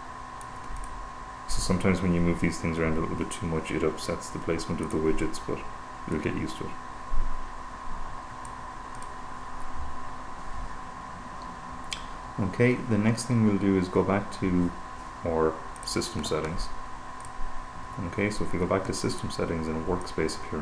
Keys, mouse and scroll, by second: 5.0 click, 6.5-9.4 drag, 16.4 click, 17.5 click, 19.5 click, 20.4 click.